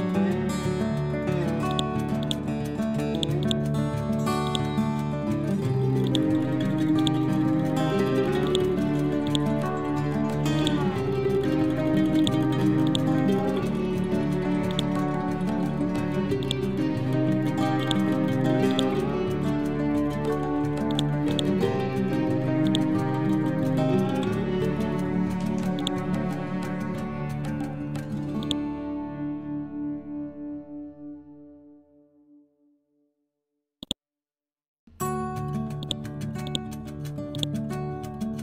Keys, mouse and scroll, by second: 0.3 scroll down 1, 1.6 click, 2.4-2.8 scroll up 1, 3.0-5.6 drag, 5.6-6.0 scroll down 1, 6.0 click, 9.4-10.5 scroll down 1, 10.5 click, 11.3 scroll up 1, 12.0-14.6 drag, 14.6 right click, 16.3 click, 18.2 c, 18.6-23.6 drag, 23.6 scroll up 1, 24.3 ctrl+scroll up 1, 24.5 ctrl+Home, 25.7 shift+click, 27.0-27.6 typing, 28.3 click, 28.7 scroll down 1, 33.7 click, 34.2 scroll up 1, 35.7-38.4 drag.